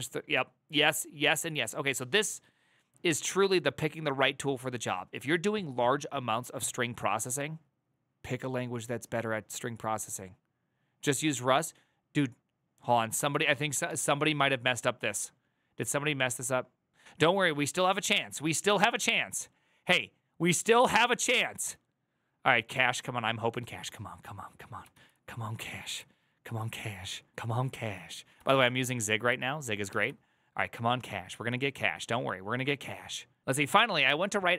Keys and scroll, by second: 13.6 ctrl+r, 24.6 alt+[, 27.2 alt+{, 28.2 alt+{.